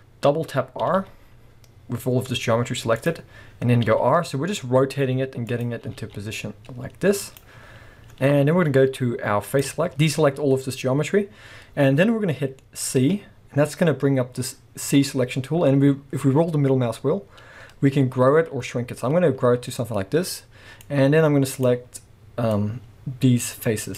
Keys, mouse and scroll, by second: 0.9 r, 3.1 click, 3.8 r, 5.6 click, 5.8 r, 7.4 click, 7.8-9.5 scroll up 1, 9.5 click, 9.9 a, 13.0 c.